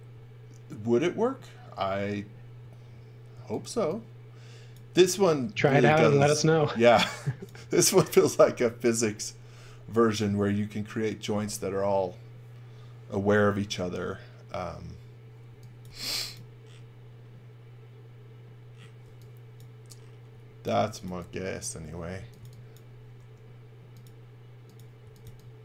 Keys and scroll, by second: 3.3 x, 3.7 v, 5.4-6.4 typing, 15.5 x, 15.9 v, 19.0 x, 20.3-23.2 typing, 24.8-25.6 typing.